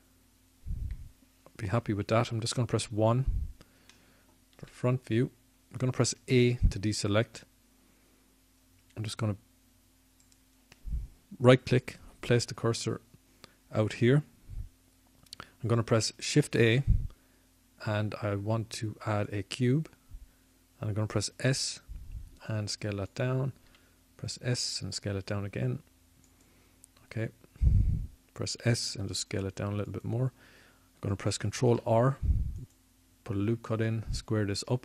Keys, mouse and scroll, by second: 7.0 KP_1, 11.2 a, 21.8 shift+a, 26.5 s, 28.8 s, 31.9 click, 32.1 click, 32.3 click, 33.5 s.